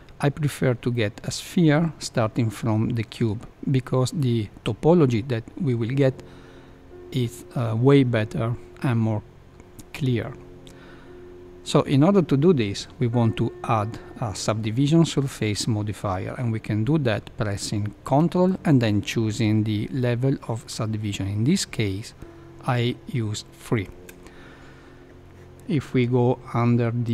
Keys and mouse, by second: 0.9-1.7 middle drag, 23.6 ctrl+3, 27.0 click.